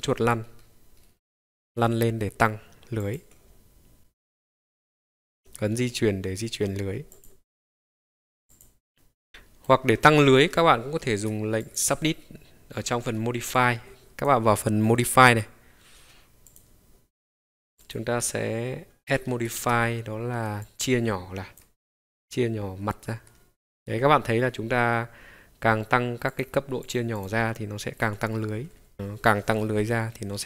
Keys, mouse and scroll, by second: 7.1 click, 8.5 click, 9.3 middle click, 9.3-9.7 scroll down 3, 9.3 KP_Decimal, 10.8 F4, 11.6-12.1 drag, 12.9-16.5 ctrl+drag, 17.8-23.7 drag, 26.3 click, 26.8-28.5 drag, 28.5 scroll down 1, 28.9-30.4 middle drag.